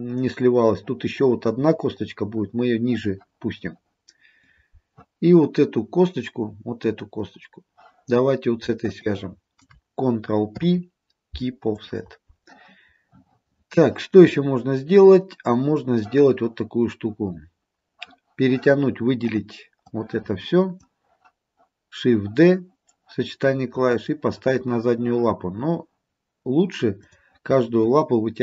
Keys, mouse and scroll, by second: 9.0 shift+click, 10.6 ctrl+p, 14.4-16.8 scroll down 1, 19.3 click, 19.9 click, 27.1 click.